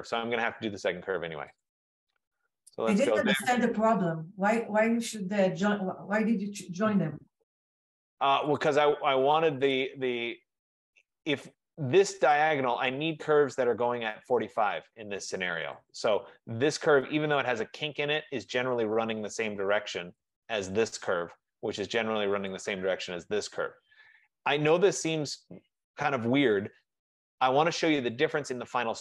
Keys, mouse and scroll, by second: 0.1 Escape, 1.8 click, 3.3 click, 5.0 click, 6.1 Return, 8.7 click, 9.9 click, 12.5 click, 16.0 click, 20.4 click, 22.6 click, 28.2 click.